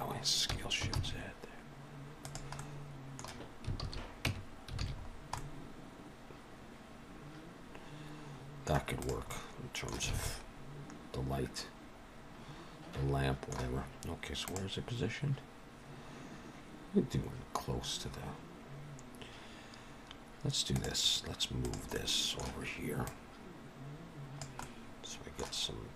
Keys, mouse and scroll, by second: 0.4 s, 2.5 middle click, 3.7 alt+a, 4.2 Tab, 4.7 alt+a, 5.0-5.9 scroll down 3, 5.3 middle click, 8.8 click, 9.2 middle click, 10.1 alt+a, 10.1 middle click, 21.5 click, 21.8 middle click, 23.0 click, 24.5 middle click.